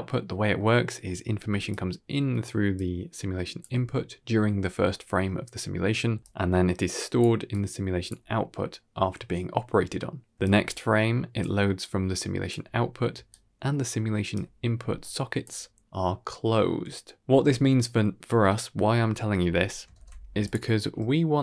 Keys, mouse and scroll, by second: 0.4 middle click, 1.2 d, 1.6 click, 2.3 d, 2.6 click, 2.6 d, 3.5 d, 3.6 d, 6.2 click, 6.2-9.0 typing, 7.4 click, 10.3 click, 10.3-13.0 typing, 11.7 click, 13.2-14.2 right drag, 14.2 d, 14.9 right click, 14.9 click, 14.9 d, 15.3 d, 16.0 d, 19.9 ctrl+space, 20.3 click, 20.7 g.